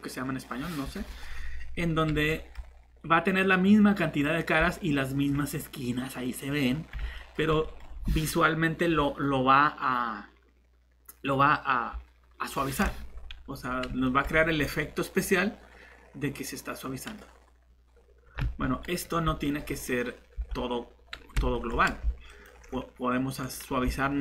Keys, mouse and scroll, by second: 5.1 typing, 18.6 ctrl+shift+z, 20.4 shift+Tab.